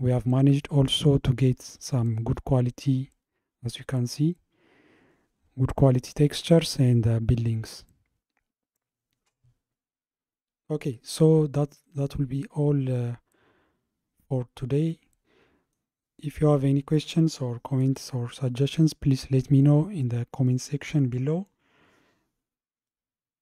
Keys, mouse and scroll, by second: 0.0-2.3 shift+middle drag, 2.3-5.4 scroll up 1, 7.4-10.4 middle drag, 12.5-13.1 scroll down 1, 13.1-16.2 middle drag, 22.9-23.4 middle drag.